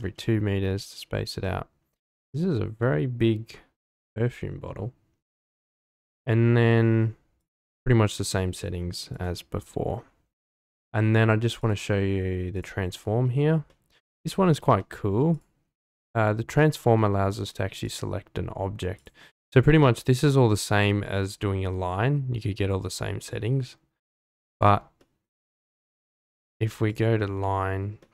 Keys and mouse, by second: 1.4-2.4 middle drag, 2.5-4.6 middle drag, 8.6 click, 11.6 click, 13.7-14.0 middle drag, 14.8-15.1 shift+middle drag, 15.3 click, 15.8-16.5 middle drag, 17.9-20.8 drag, 25.0 shift+middle drag, 26.3-27.0 drag, 28.0-28.1 middle drag.